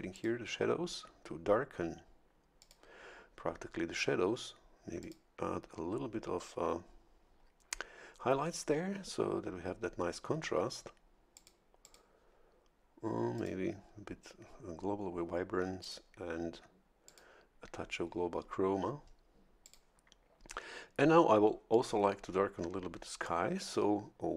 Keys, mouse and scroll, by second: 0.1 click, 2.6 click, 5.0 click, 11.3 click, 11.8 click, 13.4 click, 15.8 click, 17.0 click, 19.6 click.